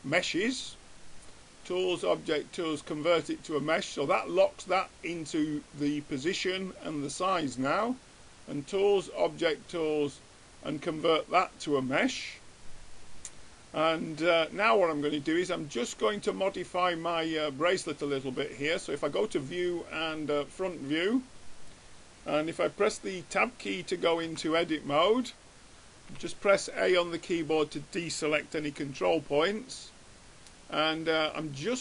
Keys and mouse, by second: 0.8-2.5 drag, 7.3-8.5 drag, 8.7-10.3 drag, 12.6-14.4 middle drag, 15.8-17.0 drag, 16.4 right click, 17.0-18.0 middle drag, 19.2 click, 19.8-21.0 right drag, 24.6 Tab, 26.4 a, 28.9 b, 30.1-31.5 middle drag.